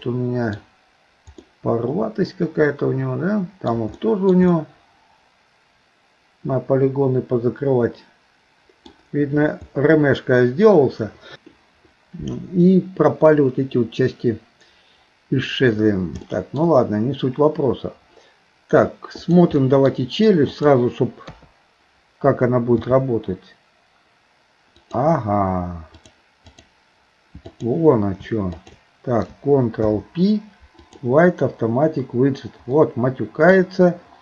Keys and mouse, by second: 0.0 middle click, 1.5-3.7 middle drag, 4.0 shift+middle click, 4.5-8.9 middle drag, 12.7-15.5 middle drag, 16.3 shift+middle click, 19.3 click, 19.6 middle click, 21.3 KP_3, 22.9 r, 26.1 click, 27.6 click, 28.6 shift+click, 29.8 ctrl+p, 32.8 middle click.